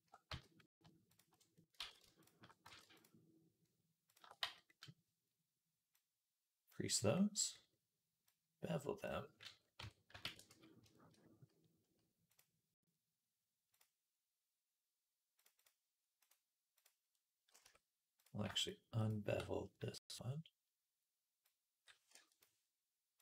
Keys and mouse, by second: 0.1 z, 0.9 alt+shift+click, 1.0-2.8 alt+shift+middle drag, 1.6 ctrl+z, 2.5 ctrl+z, 2.8 alt+shift+click, 3.1-5.8 alt+shift+middle drag, 4.2 z, 5.8-18.1 drag, 9.6 Tab, 10.1 ctrl+a, 16.1-18.3 right drag, 17.5 Tab, 18.3-20.5 alt+shift+drag, 18.4 alt+shift+right click, 18.9 alt+shift+right click, 20.5-23.2 right drag, 21.3-22.3 drag, 23.1-23.2 drag.